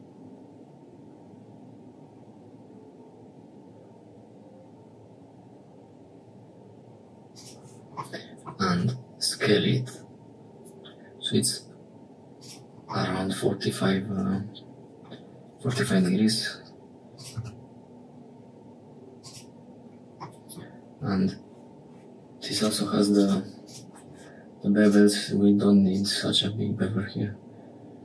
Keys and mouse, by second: 8.0 middle click, 8.6 s, 12.9 middle click, 15.6 g, 17.2 s, 20.1 middle click, 20.9 Tab, 22.4 click, 23.0 click, 23.5 click, 24.7 click, 25.9-28.0 drag.